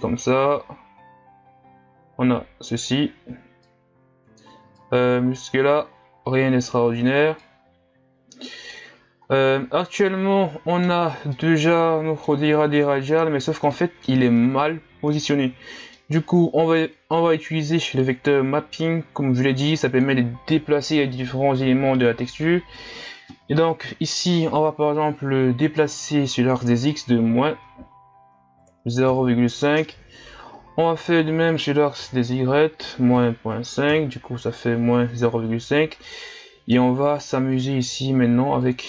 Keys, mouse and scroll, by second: 10.1-17.1 middle drag, 17.1-35.8 drag, 38.6-38.8 drag.